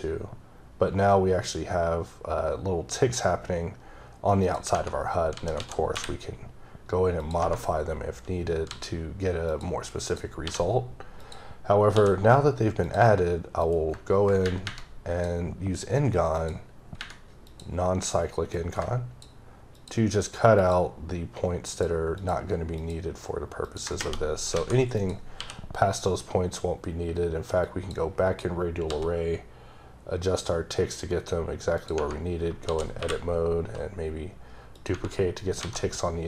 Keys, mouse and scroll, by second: 0.7-4.4 scroll up 18, 4.4 click, 7.8 scroll up 1, 8.7 s, 9.5 click, 10.1 click, 10.4 h, 11.2 click, 11.9 d, 12.8 click, 13.6 click, 16.4 click, 17.5 click, 18.5 click, 20.6 ctrl+double click, 21.7 ctrl+click, 22.2 ctrl+click, 22.8 ctrl+double click, 23.6 ctrl+click, 25.0 click, 25.4 q, 27.6 click, 28.9 d, 30.5-31.8 scroll up 7, 31.8 click, 32.0 Tab, 34.8 click, 34.9 Tab.